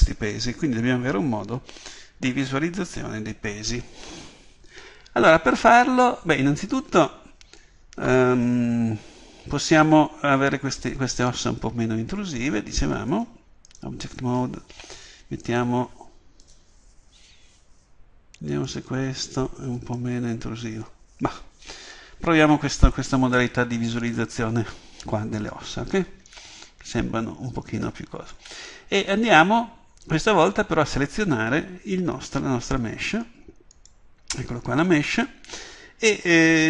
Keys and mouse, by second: 13.1-33.8 drag, 33.8 right click.